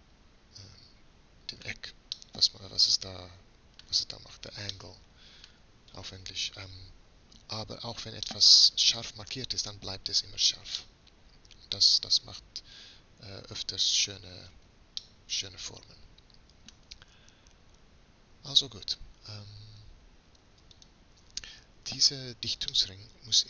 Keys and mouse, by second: 3.6-5.1 middle drag, 12.9-14.5 middle drag, 19.6-20.8 middle drag, 20.8-22.7 drag.